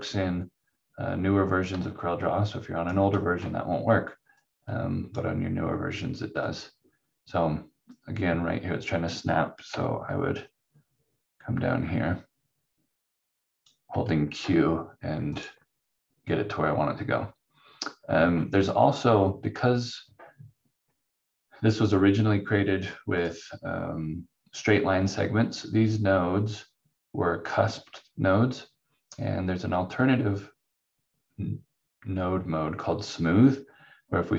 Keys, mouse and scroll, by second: 4.4 click, 9.7 click, 13.7 q, 15.3 click, 23.1 click.